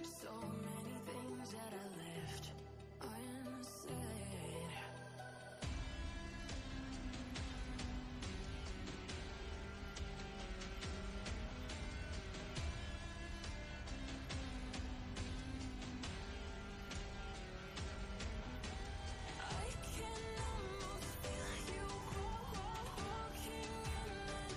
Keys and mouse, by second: 9.4 click, 15.5 click, 19.7 click, 21.9 click.